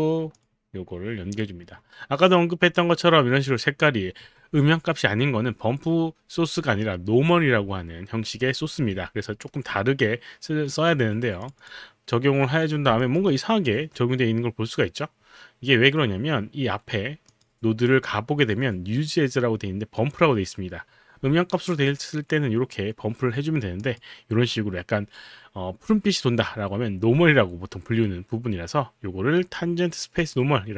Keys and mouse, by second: 0.4 click, 11.4 click, 13.0 alt+click, 13.3 alt+right click, 17.3 click, 23.8 click, 30.2 click.